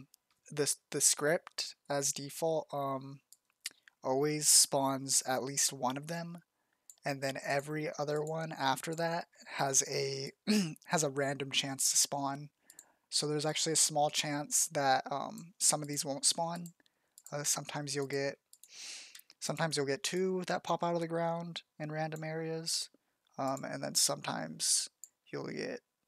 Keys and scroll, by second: 20.0 z, 22.3 f.